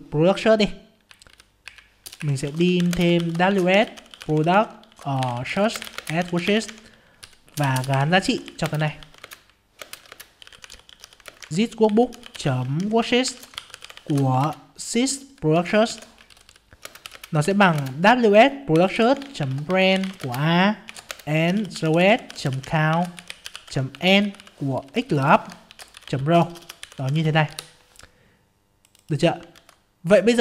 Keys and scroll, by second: 9.2 ctrl+space, 14.4 ctrl+space, 17.8 ctrl+space, 29.5 ctrl+c.